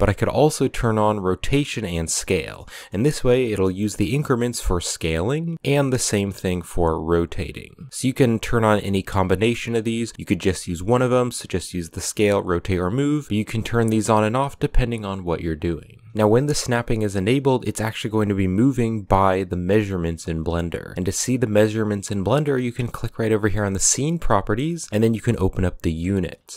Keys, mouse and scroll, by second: 2.5-2.8 middle drag, 2.8 scroll down 1, 3.4 s, 5.5 r, 7.9-10.7 drag, 13.2-15.7 drag, 23.1 click, 24.7-26.5 drag.